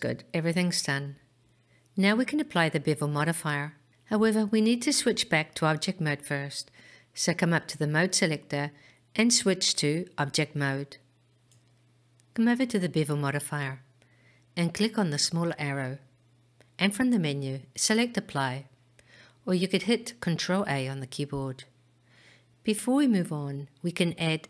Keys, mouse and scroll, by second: 3.8 click, 6.7-9.2 drag, 15.7-18.6 drag.